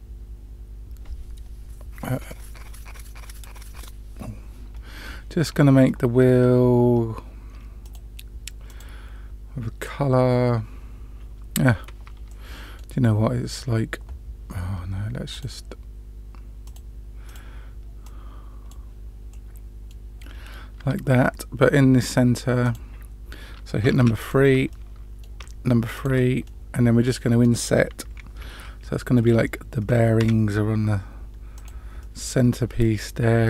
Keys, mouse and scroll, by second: 1.8 click, 7.8 click, 8.6 click, 12.2-12.8 middle drag, 15.3-16.6 drag, 17.2 click, 19.3 middle click, 20.2-20.7 scroll up 2, 20.7 Tab, 22.6 click, 23.9 3, 24.2 click, 24.7-25.2 middle drag, 25.9 shift+click, 26.4-27.4 middle drag, 32.0 middle click.